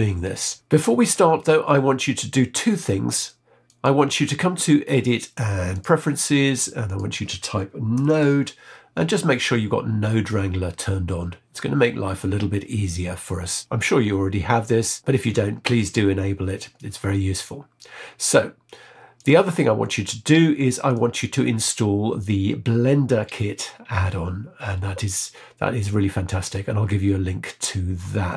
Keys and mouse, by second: 3.6-6.0 drag.